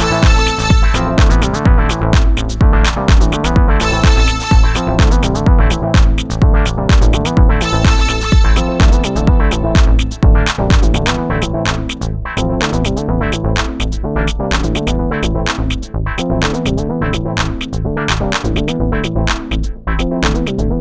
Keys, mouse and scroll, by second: 6.9-9.0 middle drag, 9.3-10.8 middle drag, 13.8 x, 15.6 space, 19.2 KP_1.